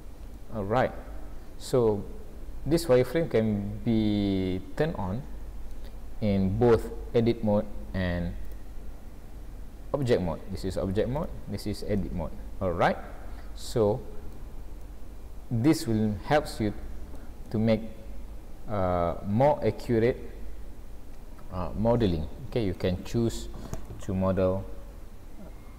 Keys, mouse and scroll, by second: 0.4 middle click, 8.7 Tab, 9.4 Tab, 11.2 Tab, 12.0 middle click, 14.9 middle click, 17.5 middle click, 23.9 middle click.